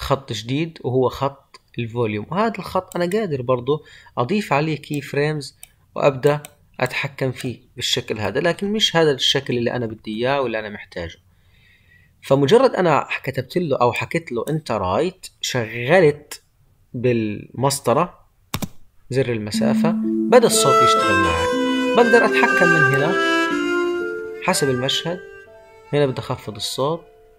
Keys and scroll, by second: 8.4 ctrl+z.